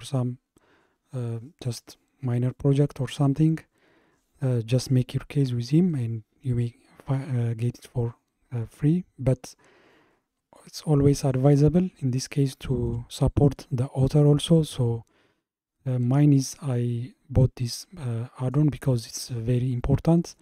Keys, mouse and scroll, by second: 12.2-14.9 shift+middle drag, 14.9-15.8 scroll up 1, 15.8-18.8 middle drag, 19.8-20.4 shift+middle drag.